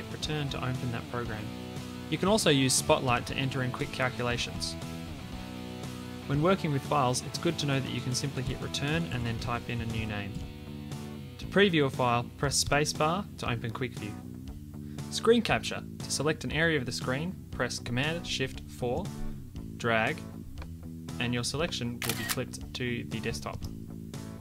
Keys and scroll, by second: 6.0 Escape, 8.5 Return, 18.8 shift+super+4.